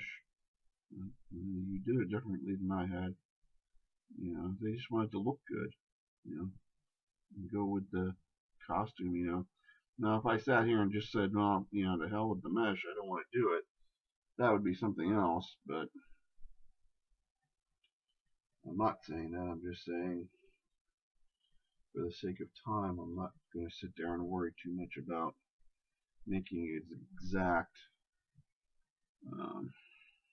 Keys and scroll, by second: 24.1 shift+space, 27.8 shift+space.